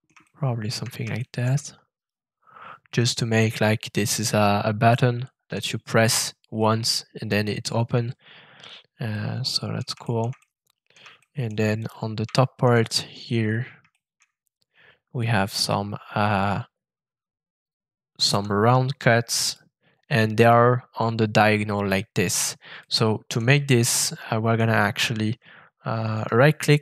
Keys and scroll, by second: 18.2 f.